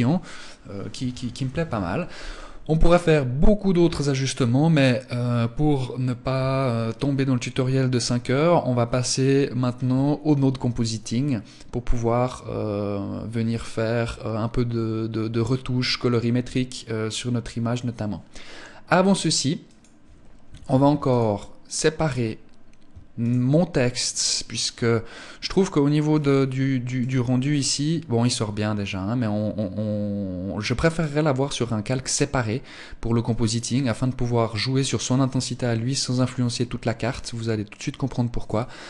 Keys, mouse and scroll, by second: 19.2 click, 20.1 ctrl+s, 21.4 right click, 22.6 shift+right click, 23.5 shift+right click, 25.5 click, 37.9 click.